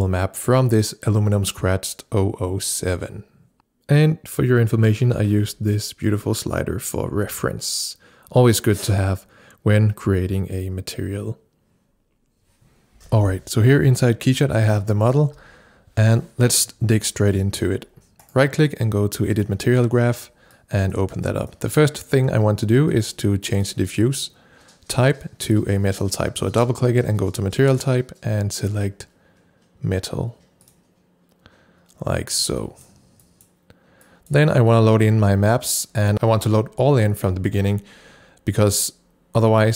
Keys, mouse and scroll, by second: 13.0 click, 15.3 shift+p, 18.2 right click, 19.3 click, 20.5 click, 23.6 double click, 27.9 click, 30.6 double click, 32.6 click.